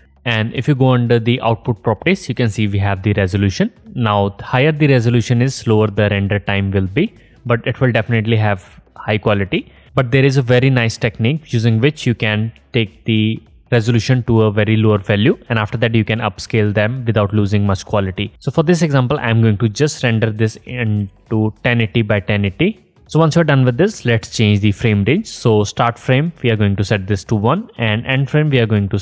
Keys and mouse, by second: 0.0-2.2 drag, 2.4-6.3 drag, 17.3-20.4 drag, 23.0-29.0 drag.